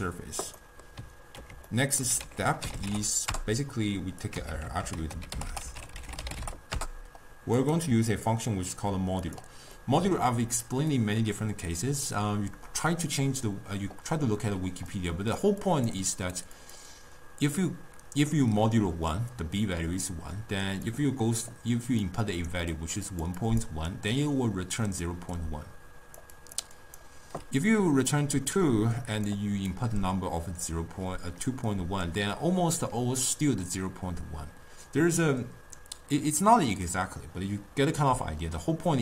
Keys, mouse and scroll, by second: 0.6-2.3 middle drag, 2.3 ctrl+a, 4.4 x, 4.9 ctrl+a, 5.5 t, 8.1-9.8 drag, 9.8-14.0 middle drag, 14.7-27.4 typing, 15.0-15.4 drag, 15.7 click, 16.1 click, 16.7 click, 21.0 click, 21.3 click, 22.1 right click, 22.8 click, 23.2 click, 23.5 click, 24.4 click, 24.8 click, 25.4-26.3 drag, 26.5 click, 26.9 click, 28.2-29.3 drag, 29.3-29.8 d, 29.8-30.8 drag, 30.8 d, 32.4-33.0 d.